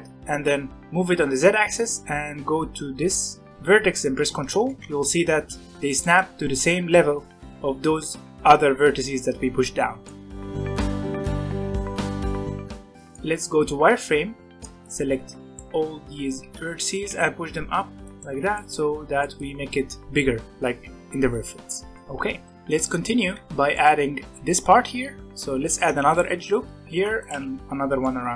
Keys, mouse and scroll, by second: 9.9 middle click, 10.7 click, 10.7 middle click, 11.0 g, 11.8 middle click, 12.2 Tab, 12.3 middle click, 12.7 Tab, 12.8 middle click, 13.7 z, 14.5 b, 16.9 g, 18.2 z, 18.5-21.7 middle drag, 21.7 Tab, 21.9 middle click, 22.6 shift+middle click, 23.1 scroll down 2, 23.3 Tab, 23.7-25.2 middle drag, 25.2 alt+a, 25.6 ctrl+r, 26.9 ctrl+r, 28.0-28.3 middle drag.